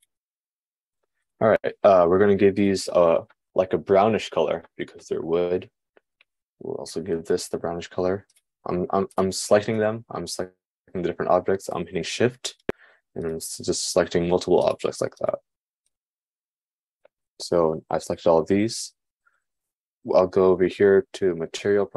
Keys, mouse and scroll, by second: 0.4 shift+click, 0.6-7.7 shift+middle drag, 7.7 shift+click, 7.9-13.3 shift+middle drag, 13.9 shift+click, 15.3 shift+click, 16.4 shift+click.